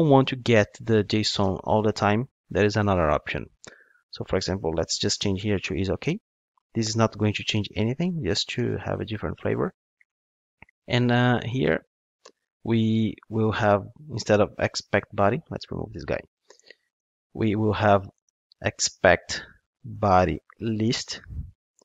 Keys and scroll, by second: 8.5 Return, 21.1 Return.